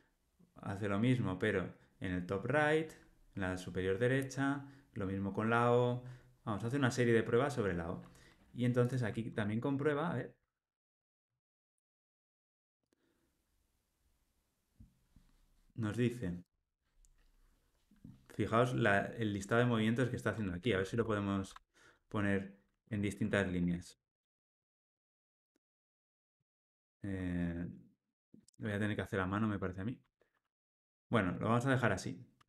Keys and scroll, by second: 9.3 alt+Return, 20.9 ctrl+alt+l, 22.8 alt+Return, 31.8 super+z.